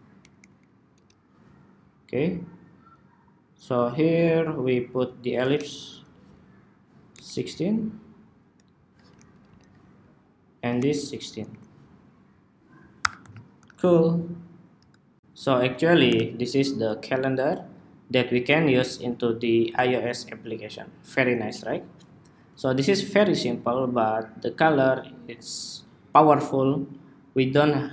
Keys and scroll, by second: 0.1 alt+Left, 4.6 alt+shift+Left, 6.2 alt+Right, 9.8 alt+shift+Right, 10.6 alt+Right, 12.1 super+-, 12.3 super+-, 12.7 super+-, 15.8 super+-.